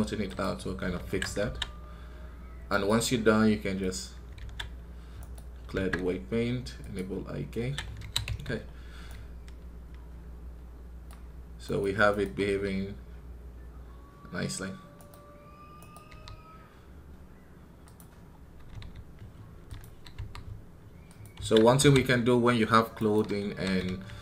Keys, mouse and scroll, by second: 1.4 scroll down 3, 2.6 right click, 8.3-8.7 scroll down 3, 12.4 r, 18.0-18.6 scroll up 1.